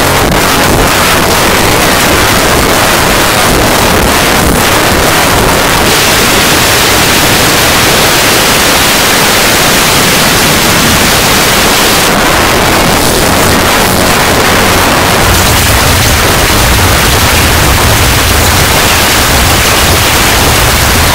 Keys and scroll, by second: 1.6 w, 1.9 Down, 2.1 Return, 12.0 Page_Down.